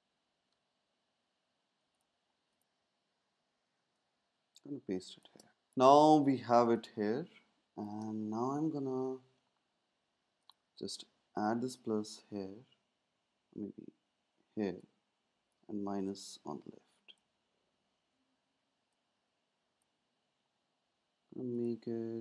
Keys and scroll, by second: 6.7 space, 18.1 z.